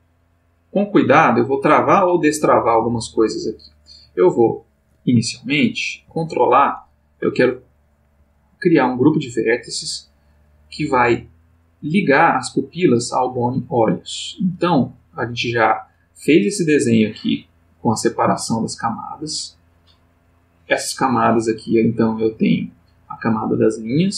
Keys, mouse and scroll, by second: 0.4-1.7 drag, 3.0-4.9 drag, 5.3-6.2 ctrl+middle drag, 20.5-21.9 middle drag, 22.0 middle click, 23.7 click.